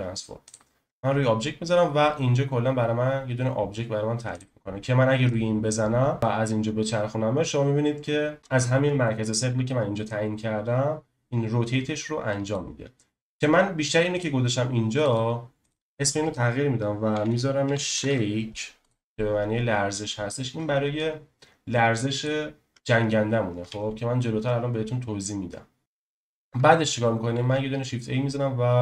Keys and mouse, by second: 4.3 click, 6.2 ctrl+z, 6.2 click, 13.2 ctrl+z, 14.9 click, 15.1 click, 15.7-18.8 drag, 20.9 click, 23.7 ctrl+z, 27.4 shift+a.